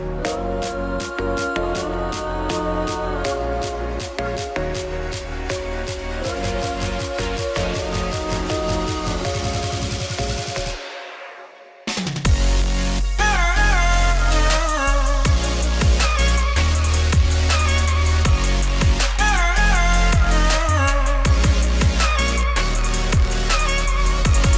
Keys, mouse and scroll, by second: 0.4-0.7 scroll up 1, 0.7 ctrl+right click, 1.3 ctrl+z, 1.7 g, 2.3-6.4 ctrl+right drag, 6.4 click, 6.6 g, 8.0 alt+click, 8.1 middle click, 8.6 f, 8.9 alt+click, 9.1 f, 9.5-11.0 middle drag, 11.3 KP_1, 12.1 a, 13.8 Tab, 13.9 click, 14.0 Tab, 14.2 a, 15.8 KP_1, 16.2 g, 16.7 Tab, 16.8 click, 17.2 click, 17.6-18.8 drag, 19.3 click, 19.5 middle click, 19.6 scroll down 4, 19.8 middle click, 19.8 click, 20.0 middle click, 20.1 z, 20.4 middle click, 21.2 scroll up 1, 21.4 click, 21.6 shift+click, 21.8 Tab, 22.1 KP_3, 22.5 z, 23.7 z.